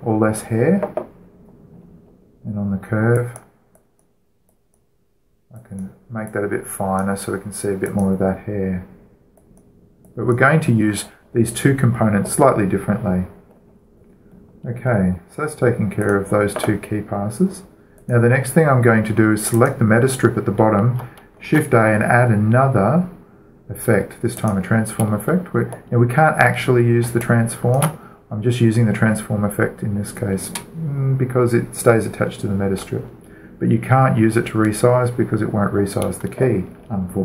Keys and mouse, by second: 2.5-4.0 middle drag, 4.0-12.9 drag, 14.4-16.9 middle drag, 16.9-20.5 drag, 20.3-22.1 right drag, 22.3 shift+a, 25.1-26.9 drag, 26.9-33.1 middle drag.